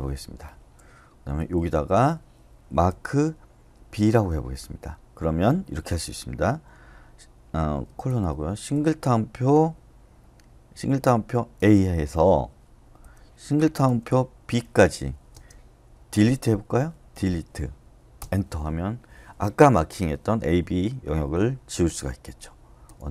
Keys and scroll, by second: 1.1-2.9 typing, 4.0 b, 8.0-8.7 typing, 11.5 a, 13.0-15.3 typing, 17.1 d, 18.2 Return, 22.8 u.